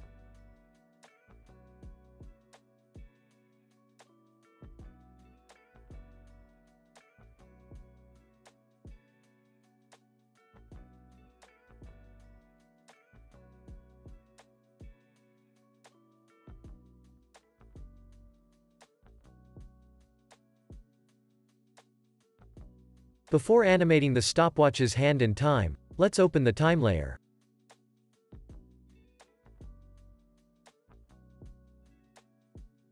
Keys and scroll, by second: 4.0 super+s, 4.3 space, 11.2 space, 26.6 super+s.